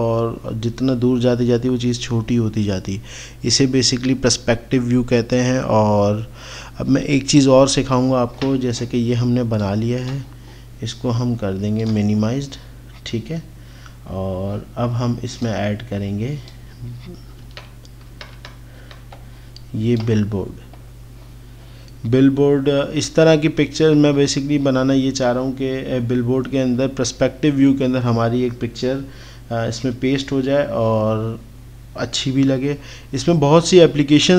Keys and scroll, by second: 19.2 alt+Tab.